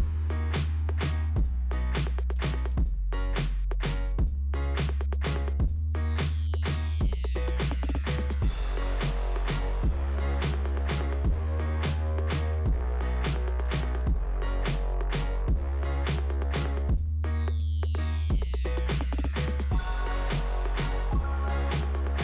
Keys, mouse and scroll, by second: 0.6 click, 1.8 click, 2.8 click, 7.1 scroll up 2, 8.0 Delete, 8.2 scroll down 2, 9.0 scroll up 2, 9.5 click, 10.9 click, 12.8 click, 14.9 click, 19.9 click, 21.3 click.